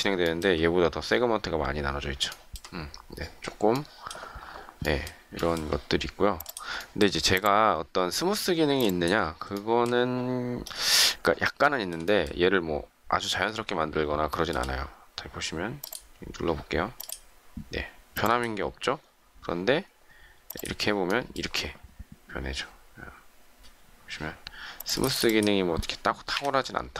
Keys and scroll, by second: 8.6 space, 26.2 Delete.